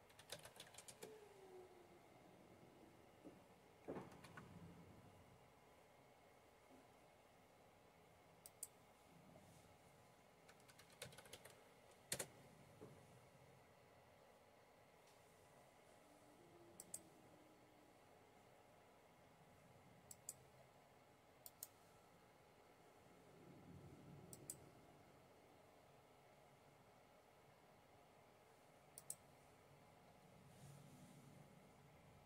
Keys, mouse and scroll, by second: 0.0-1.9 typing, 4.0 super+1, 8.4 click, 10.4-11.7 typing, 12.0 Return, 16.8 click, 20.0-21.1 drag, 21.4-24.1 right drag, 26.5 click, 29.0-32.2 drag.